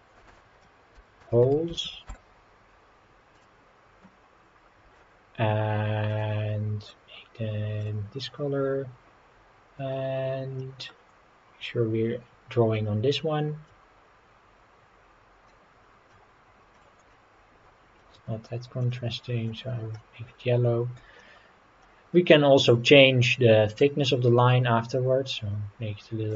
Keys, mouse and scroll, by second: 3.4 click, 6.1 click, 10.6 middle click, 12.5-12.8 scroll up 3, 13.7-16.9 drag, 17.1 middle click, 18.8 click, 21.2 middle click, 23.8-26.3 drag.